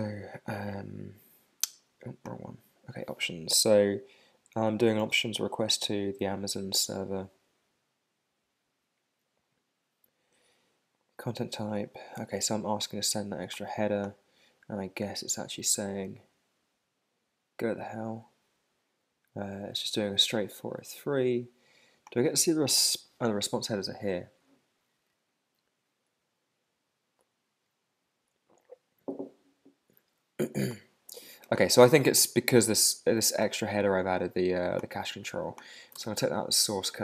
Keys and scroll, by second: 35.9 super+Tab.